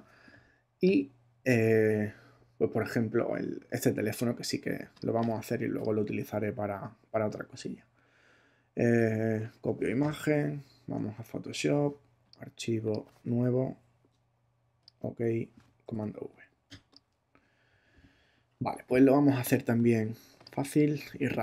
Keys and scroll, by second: 10.1 super+Tab, 15.8 super+v.